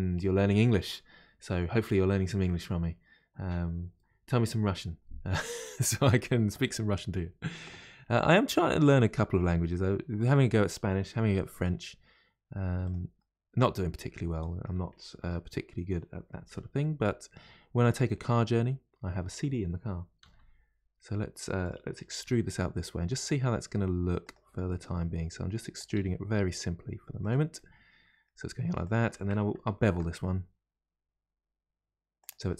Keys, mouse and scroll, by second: 8.2-9.7 middle drag, 9.7-11.2 scroll up 3, 11.2 r, 13.2-15.2 middle drag, 15.2 Tab, 16.8-17.8 middle drag, 17.8 click, 18.2-20.2 middle drag, 20.2 g, 24.5 e, 27.6-28.8 middle drag, 28.8 click, 29.8 ctrl+b.